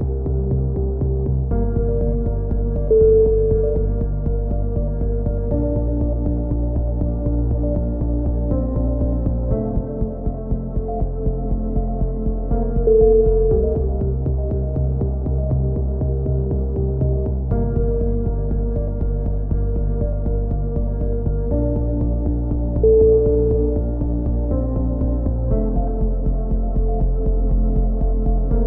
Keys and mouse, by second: 1.0 click, 1.3-2.8 middle drag, 1.4 click, 2.5 z, 2.8 click, 5.5 a, 7.0-12.8 middle drag, 12.0 z, 12.4 z, 12.8 z, 13.2 click, 17.2 click, 18.1 KP_7, 18.6 z, 19.4 click, 21.0 z, 21.3 z, 22.2 z, 23.1-26.8 middle drag, 23.7 x, 25.2 a, 25.3 z, 27.0 z, 27.4 z, 27.8 z, 28.2 click.